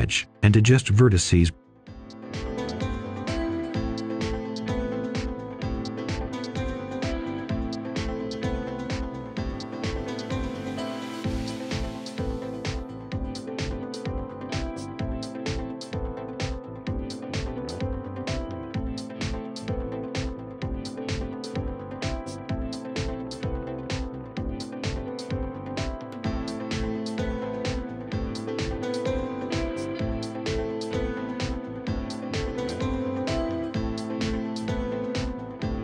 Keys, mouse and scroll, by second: 5.4-5.8 scroll down 1, 5.8 right click, 6.1 scroll up 1, 6.5-9.0 ctrl+shift+drag, 9.3 right click, 9.8 scroll up 1, 10.7 ctrl+shift+click, 11.5-14.9 scroll up 1, 16.5 right click, 17.3-22.6 drag, 23.2-24.2 scroll down 1, 24.2 Tab, 24.6-24.9 scroll down 1, 24.9 Tab, 26.2 click, 26.8-28.5 right drag, 28.5 scroll up 1, 28.7 right click, 29.2-29.9 scroll up 1, 31.4 click, 32.5 right click, 33.2 scroll down 1, 33.5 scroll up 1, 33.7 right click, 34.2-35.8 ctrl+shift+drag.